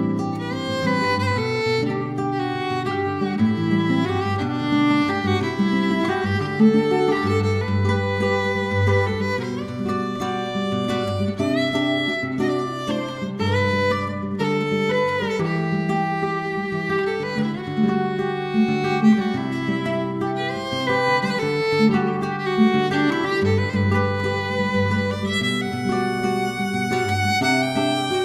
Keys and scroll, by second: 0.0 Return, 1.3 ctrl+d, 1.3 F2, 1.4 BackSpace, 1.5 4, 1.6 Return, 2.8 ctrl+d, 2.9 End, 3.1 5, 3.2 Return, 5.6 9, 5.8 BackSpace, 5.9 Escape, 6.2 9, 26.6 4, 26.7 Return.